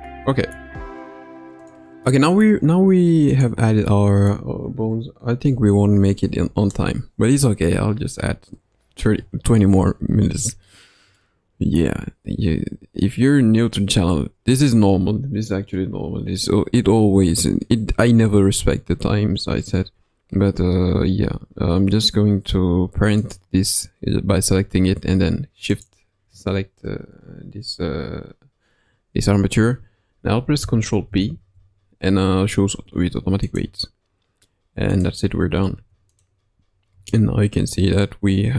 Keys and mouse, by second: 0.0 middle click, 1.5 click, 2.0-2.4 middle drag, 3.3-3.8 drag, 3.8-4.3 middle drag, 11.1-11.8 middle drag, 25.6 shift+click, 31.0 ctrl+p, 34.9 click, 35.5 ctrl+Tab, 36.1 click, 36.8 r.